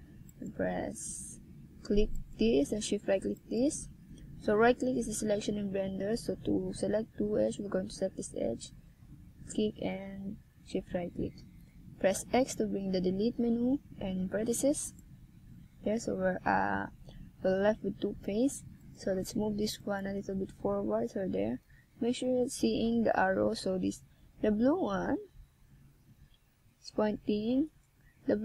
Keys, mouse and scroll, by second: 1.0 click, 6.9 KP_3, 8.6 e, 20.2 click, 22.1 click, 22.9-24.1 shift+scroll down 6, 24.9 click, 26.3 middle click.